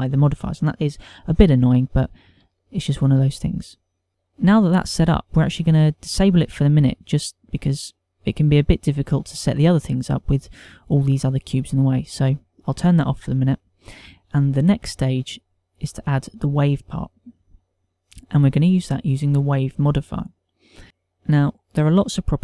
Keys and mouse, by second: 3.2 ctrl+middle click, 3.8 shift+middle click, 4.1 ctrl+middle click, 4.1 click, 6.7 click, 13.0 click, 14.1 click, 16.1 click, 16.9 click.